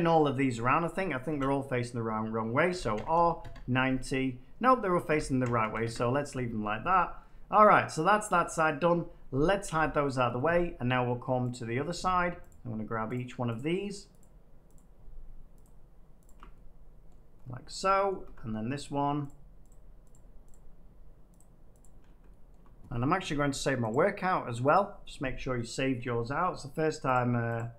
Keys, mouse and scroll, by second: 0.7 Tab, 1.2-3.3 typing, 5.0-5.5 typing, 5.8 Return, 6.4 Tab, 6.9-7.7 scroll, 8.0-8.3 scroll, 8.3 Tab, 8.8 middle click, 9.6 h, 11.4 click, 12.4 click, 13.1 shift+click, 13.4 shift+click, 13.5 shift+click, 17.0 middle click, 17.0 scroll down 1, 17.4-17.8 scroll up 5, 18.0 shift+middle click, 18.7 shift+click, 19.2 shift+click, 22.4 shift+middle click, 23.8 click, 24.7 click, 25.9 middle click, 26.8 shift+middle click, 27.1 shift+click.